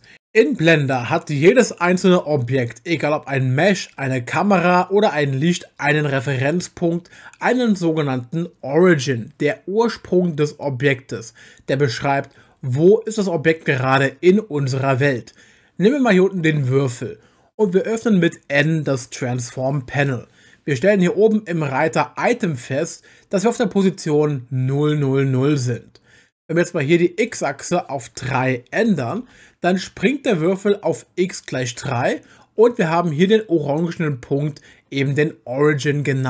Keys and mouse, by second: 0.0 click, 0.1 n, 3.9 click, 5.5 click, 16.6 click, 19.2 n, 27.2-29.2 drag.